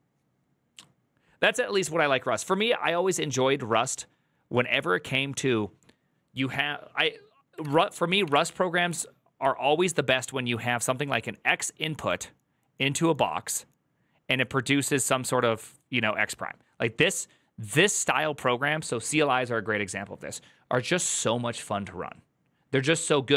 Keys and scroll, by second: 7.6 alt+=, 8.2 ctrl+n, 8.3 Return.